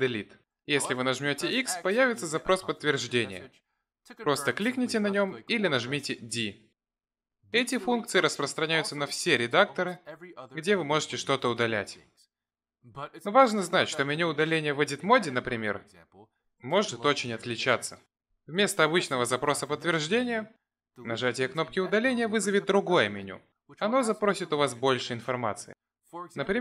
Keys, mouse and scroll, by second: 0.8 click, 1.7 x, 8.9 click, 10.3 Delete, 17.4 Tab, 18.0 click, 23.1 x.